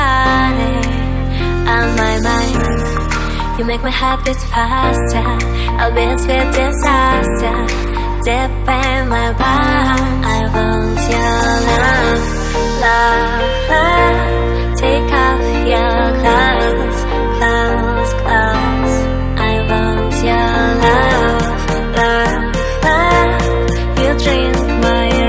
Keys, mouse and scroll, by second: 0.4 click, 2.3 click, 3.7 click, 5.9 click, 7.2 click, 7.7 click, 9.1 click, 11.2 click, 11.9 click, 12.7 shift+click, 14.6 click, 14.8 click, 16.1 click, 17.1 click, 20.3 click, 21.3 click, 23.7 click.